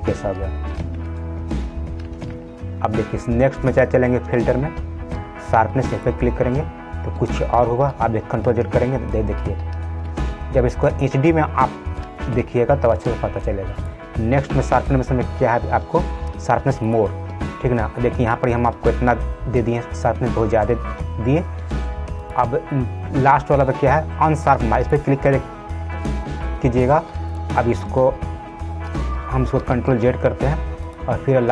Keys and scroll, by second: 8.7 ctrl+z, 29.9 ctrl+z.